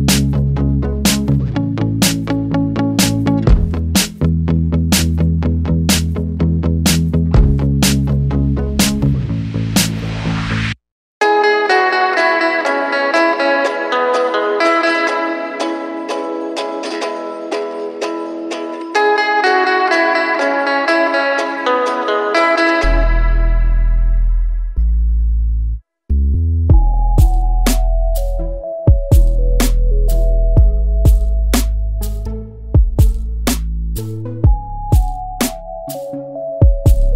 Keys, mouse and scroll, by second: 0.8 click, 3.3 scroll down 1, 3.8 alt+a, 4.1 Tab, 4.6 alt+a, 5.3-5.8 scroll down 1, 5.8 middle click, 6.1 scroll down 1, 6.2-8.4 middle drag, 8.4-9.0 scroll up 2, 9.0-9.5 scroll up 1, 9.5 ctrl+KP_1, 10.5 click, 10.8 scroll up 2, 10.9 Tab, 11.6 click, 13.0 click, 14.7 Tab, 14.9 scroll down 1, 15.2 alt+a, 15.6 middle click, 15.8-16.6 scroll down 2, 16.6-17.0 scroll up 1, 17.0 KP_1, 17.6-18.1 scroll up 3, 18.1 Tab, 18.6 middle click, 19.3-19.6 scroll down 2, 20.6 k, 23.5 Tab, 24.0 KP_1, 24.7 scroll up 2, 24.9-25.4 scroll down 2, 25.4-25.9 scroll up 1, 25.9-26.9 shift+middle drag, 26.9 click, 29.9-32.1 drag, 35.6 click, 36.6-37.1 shift+middle drag.